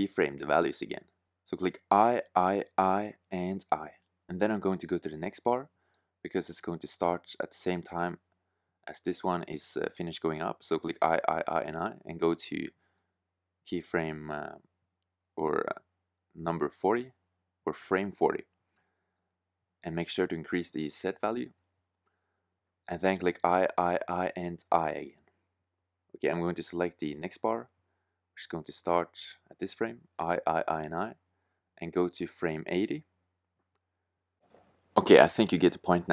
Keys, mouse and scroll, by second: 1.6-3.1 typing, 7.2-8.5 middle drag, 8.5 i, 8.9 i, 9.5 i, 9.9 i, 11.3 click, 14.9 s, 18.5-22.4 drag, 22.7 i, 22.9 i, 23.4 i, 23.8 i, 27.3-29.2 drag, 29.2 i, 29.6 i, 29.9 i, 30.3 i.